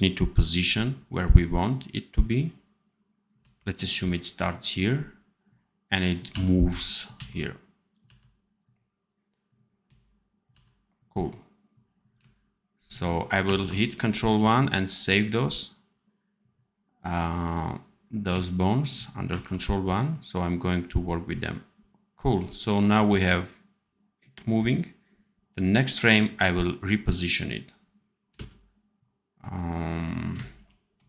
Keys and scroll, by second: 3.3 c, 6.2 v, 7.0 c, 7.9 v, 9.7 c, 10.4 v, 13.3 ctrl+1, 19.2 ctrl+1, 28.2 space, 30.4 ctrl+b.